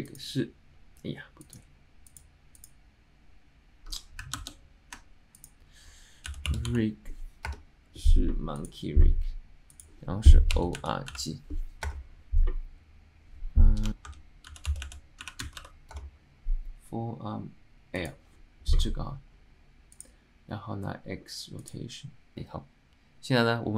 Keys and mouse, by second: 22.4-23.7 drag.